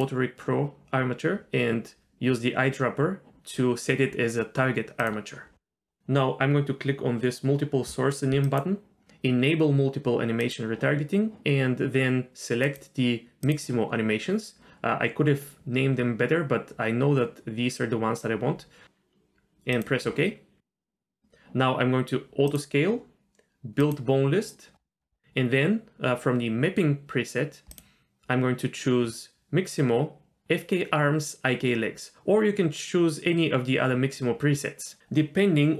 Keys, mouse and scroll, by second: 5.0-5.5 drag, 8.4-19.9 drag, 22.5 click, 23.8 click, 24.8-25.4 scroll down 4, 27.7-35.7 drag.